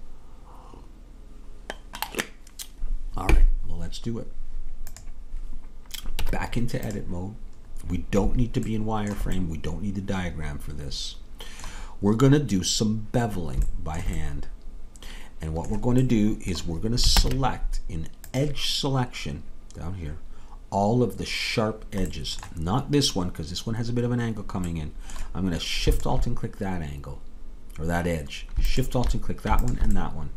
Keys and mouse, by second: 6.3 Tab, 11.1 middle click, 13.9-16.0 middle drag, 16.3 middle click, 17.2 ctrl+Tab, 23.7-29.0 middle drag, 26.0-30.3 drag, 30.1 middle click.